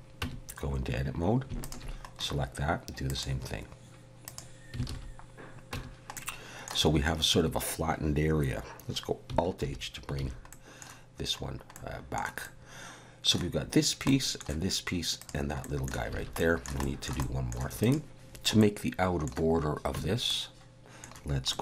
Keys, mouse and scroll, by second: 0.2 Tab, 1.6 alt+shift+click, 3.1 click, 4.9 alt+a, 5.7 Tab, 6.1 middle click, 9.6 alt+h, 10.2 alt+a, 10.5 middle click, 11.4-11.7 scroll down 1, 11.7 middle click, 12.4 middle click, 14.1 middle click, 15.2 click, 15.6 middle click, 16.1 alt+a, 16.4 middle click, 16.8 shift+middle click, 17.2 middle click, 17.8 click, 18.4 middle click, 18.6 middle click, 19.9 Tab, 20.2 middle click, 21.5 middle click.